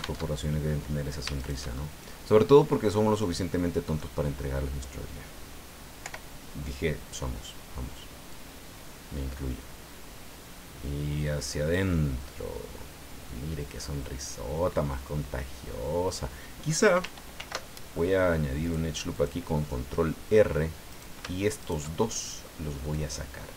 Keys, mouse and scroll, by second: 0.2 alt+Tab, 1.3 shift+right click, 1.7 shift+middle click, 1.7-4.1 shift+drag, 6.0 o, 8.3-15.2 drag, 15.4 middle click, 17.3 ctrl+r, 18.6 click, 19.1 click, 19.6 middle click, 20.9 right click, 21.6 shift+right click, 22.0 shift+middle click, 22.9-23.5 drag.